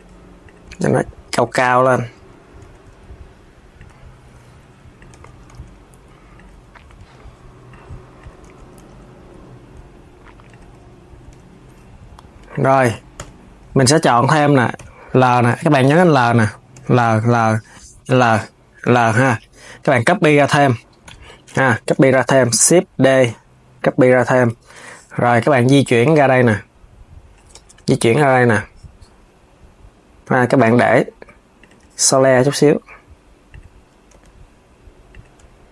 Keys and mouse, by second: 0.1 click, 0.4 g, 1.3 KP_3, 2.3 g, 3.6 KP_3, 4.6 click, 4.8 KP_1, 5.2 g, 6.2 KP_3, 7.4 click, 7.9 click, 8.1 KP_1, 8.6 g, 11.1 KP_3, 12.1 click, 12.9 l, 14.5 shift+l, 15.6 l, 21.6 KP_1, 22.4 shift+d, 25.6 click, 27.2 KP_3, 29.9 g, 35.1 KP_1.